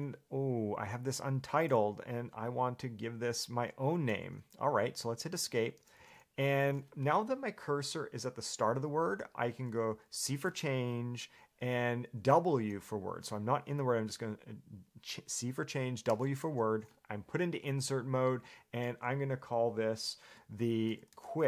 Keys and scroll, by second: 5.5 Escape, 6.2 l, 16.3 w, 20.8-21.4 typing.